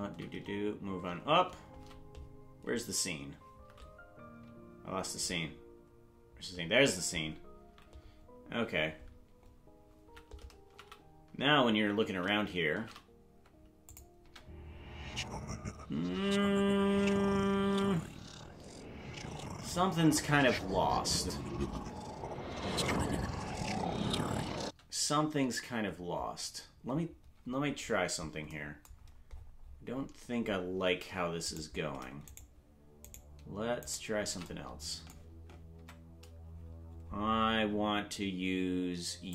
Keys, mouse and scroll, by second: 14.2 space, 24.6 space, 27.7 scroll down 4, 28.9-30.1 scroll down 16, 30.5 scroll down 3, 31.5 right click, 32.3 shift+right click, 33.1 shift+right click, 35.7 Tab.